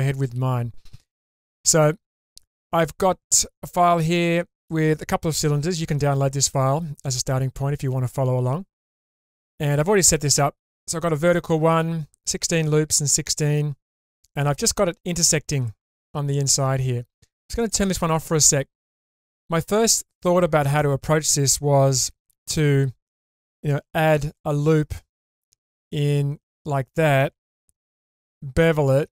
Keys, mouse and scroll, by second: 3.9 click, 4.6 click, 5.2-5.8 scroll down 1, 5.8 scroll down 2, 6.0-10.2 middle drag, 10.9-14.0 scroll up 2, 14.0-17.2 middle drag, 17.6 click, 19.7 click, 20.7 click, 22.2 Tab, 23.7 ctrl+r, 26.5 click, 28.2 ctrl+b.